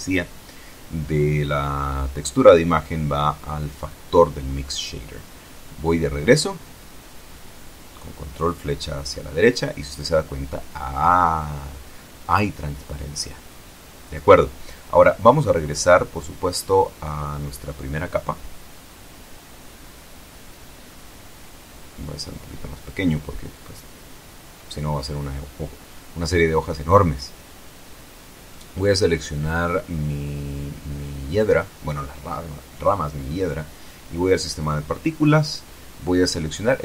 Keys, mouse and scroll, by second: 1.9-4.6 drag, 8.1 ctrl+Right, 10.6-13.8 middle drag, 15.5 click, 17.1 click, 21.4 s, 22.9 click, 24.6 click, 25.6-27.3 drag, 27.3-27.8 scroll up 1, 28.4 right click, 29.1 shift+middle click, 30.2 shift+right click, 32.6 middle click, 34.2 click, 35.1 click.